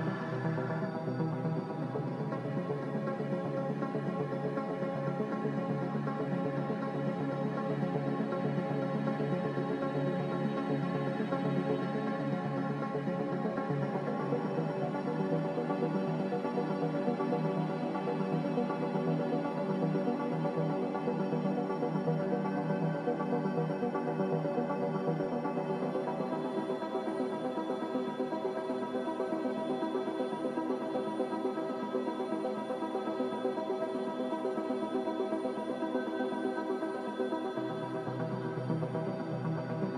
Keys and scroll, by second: 6.0 z, 12.0 Left, 21.4 2, 22.3 BackSpace, 22.6 3, 22.9 Return, 25.9 Delete, 28.1 Delete, 30.1 Delete, 31.6 Delete, 33.3 Delete, 33.5 Delete, 34.2 Right, 34.2 alt+Tab, 34.7 b, 36.1 b.